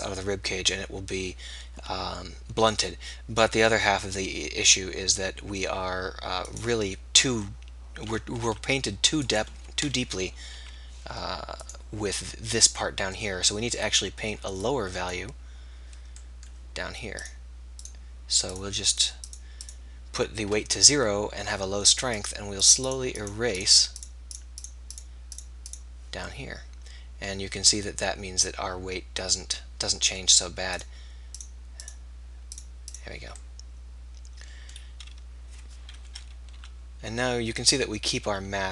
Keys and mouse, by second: 1.2-8.5 middle drag, 10.1 KP_3, 10.7 r, 13.3 click, 16.3-17.3 drag, 27.5-30.0 drag, 30.8-36.1 drag, 36.1 KP_3, 36.5 r.